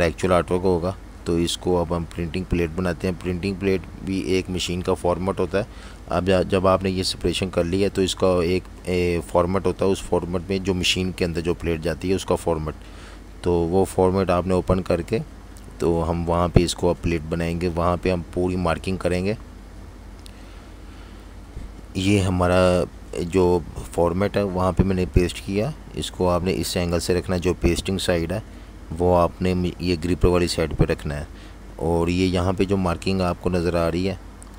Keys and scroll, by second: 7.8 F18, 11.1 super+-, 14.6 super+c, 20.7 super+v, 22.5 super+g, 29.7 z, 30.9 v, 33.7 super+y, 34.1-34.5 typing.